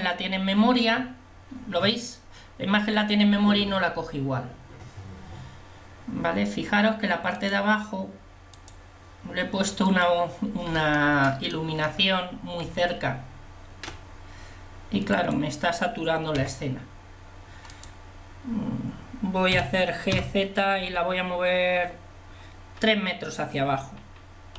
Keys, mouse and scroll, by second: 11.1 middle click, 12.7 Tab, 15.3-16.9 drag, 16.4 Delete, 19.6 g.